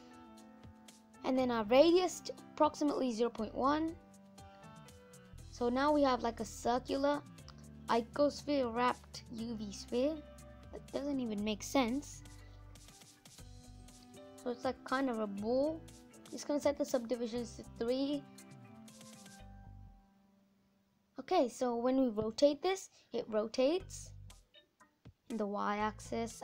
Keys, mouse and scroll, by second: 4.7-5.2 scroll up 6, 5.2 middle click, 5.8-6.1 scroll down 3, 6.1 middle click, 6.7 click, 6.9 scroll down 2, 7.2 middle click, 8.1-8.8 scroll up 7, 8.8-10.0 middle drag, 10.0-10.4 scroll up 3, 10.4-11.1 scroll down 7, 11.1-15.8 middle drag, 15.8 click, 16.5 middle click, 16.7 scroll down 1, 17.0-18.3 scroll up 6, 19.8-20.2 scroll down 6, 20.2-21.7 middle drag, 21.7-26.4 drag.